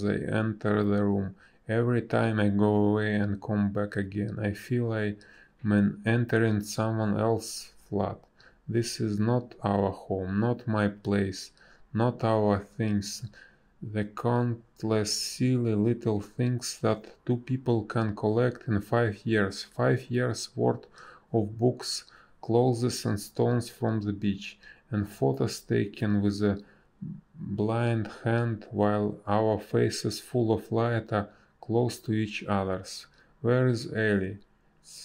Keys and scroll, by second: 4.2 ctrl+z, 4.4 space, 10.1 space, 29.5 space, 30.7 ctrl+z, 31.1 ctrl+z, 31.5 ctrl+z, 31.9 ctrl+z, 32.3 ctrl+z, 33.5 space, 34.2 b.